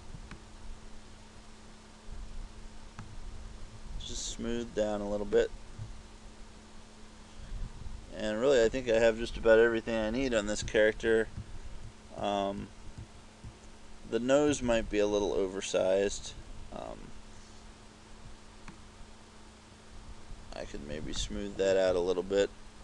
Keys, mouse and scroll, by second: 0.4 click, 5.4 click, 9.5-13.5 typing, 14.6-16.4 typing, 18.8 click.